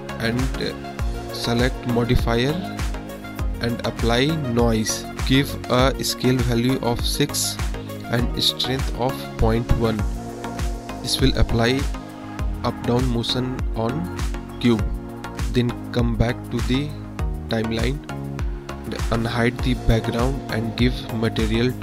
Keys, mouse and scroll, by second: 2.6-4.5 drag, 4.8 click, 5.0 click, 5.8 space, 9.0 space, 10.9 space, 12.6-13.3 drag, 13.7-15.1 drag, 15.7-16.2 drag, 21.0 click.